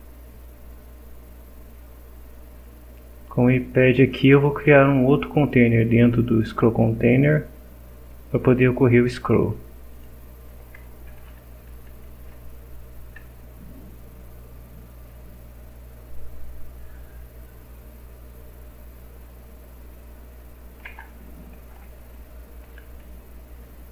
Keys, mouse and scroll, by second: 9.9 click, 11.2 v, 11.9 s, 13.9-14.3 scroll down 2, 17.0 scroll down 2, 17.5-18.1 scroll down 4, 20.8 BackSpace, 22.4-23.3 typing.